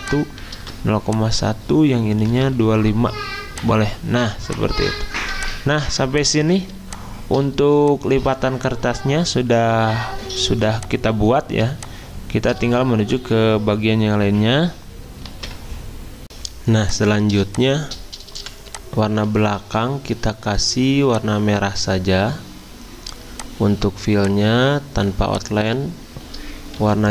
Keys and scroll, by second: 0.5 ctrl+v, 2.2-3.1 typing, 5.8-6.7 typing, 10.5 z, 11.6 alt+Tab, 18.3 v, 19.4 ctrl+z, 26.8 y.